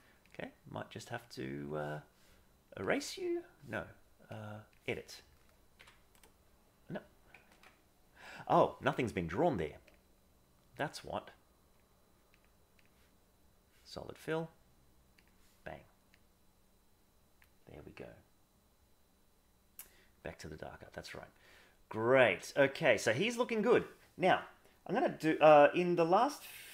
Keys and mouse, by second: 0.2-1.7 drag, 2.8 click, 4.2 click, 7.5 ctrl+z, 9.9-10.7 drag, 11.8 click, 12.7 click, 16.2-17.4 drag, 21.2-23.7 middle drag.